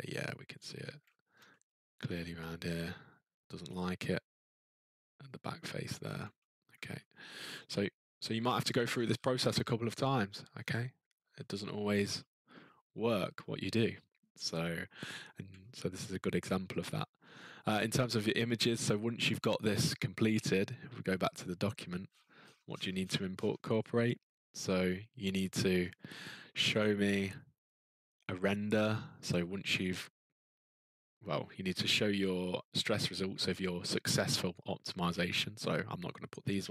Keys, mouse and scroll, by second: 0.5 middle click, 0.5 middle click, 0.6-1.3 scroll, 1.3-2.4 ctrl+middle click, 2.8 middle click, 3.9 middle click, 5.5 middle click, 5.6 middle click, 5.8 middle click, 5.9 middle click, 5.9 middle click, 6.6 middle click, 7.0 scroll, 8.0-9.8 scroll, 10.2-10.7 scroll, 11.8-12.2 ctrl+scroll, 13.8 scroll, 15.2 scroll, 17.0-20.9 ctrl+scroll, 21.4 click, 22.0-23.9 scroll, 23.9-25.7 scroll, 25.7-26.4 scroll, 29.8-31.0 scroll.